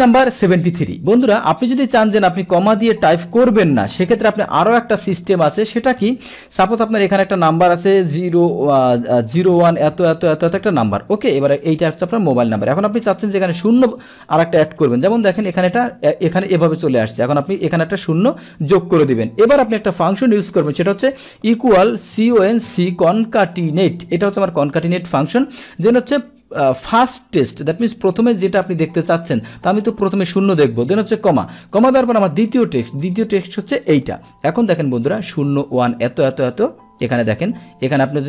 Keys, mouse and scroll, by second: 6.0 Return, 15.6 click, 17.0 click, 23.7 Down, 29.9 click, 33.0 click, 34.0 Return, 35.1 click, 35.7 click, 37.1-38.1 drag.